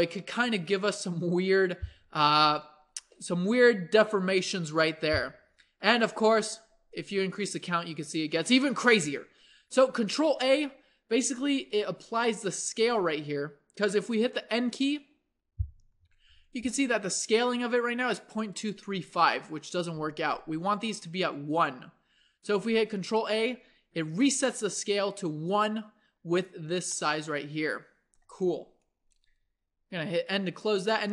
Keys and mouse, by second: 0.2-6.9 middle drag, 7.7-9.2 drag, 9.2-10.3 middle drag, 10.3 ctrl+a, 14.9 n, 18.1-22.8 middle drag, 22.8 ctrl+a, 27.3 middle click, 29.4 n, 30.4-31.1 drag.